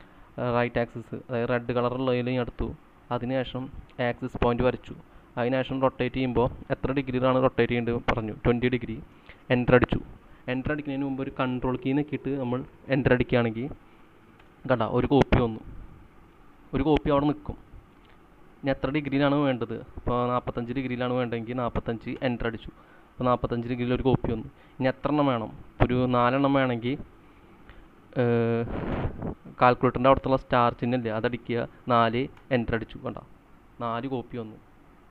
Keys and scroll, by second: 8.3-9.3 typing, 14.4 Return, 21.4-23.5 typing, 26.7-27.5 typing, 30.6 *, 31.8 4, 32.4 Return.